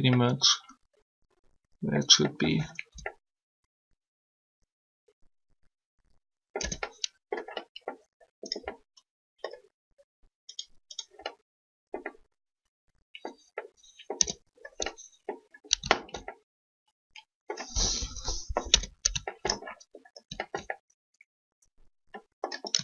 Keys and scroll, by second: 2.9 Tab, 6.6 Tab, 14.2 Tab, 17.9 3, 18.7 Tab.